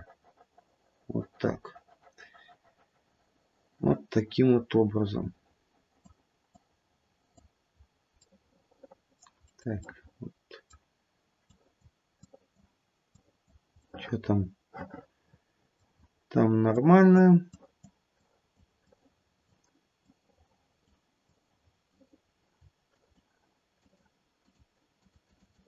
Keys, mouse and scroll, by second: 6.5 click, 7.7-8.4 scroll down 3, 8.4 middle click, 8.8 middle click, 9.1 middle click, 9.4-9.9 scroll up 1, 9.9 middle click, 10.2 middle click, 11.4 click, 12.1 click, 13.1 click, 13.9 middle click, 15.9-16.5 scroll up 1, 16.5 scroll up 1, 16.8 click, 17.4 click, 18.8 click, 20.0 click, 21.2 click, 22.1-22.5 scroll down 2, 22.8 shift+click, 23.8 shift+click, 24.4 shift+click, 24.9 shift+click, 25.2 shift+click, 25.5 shift+click.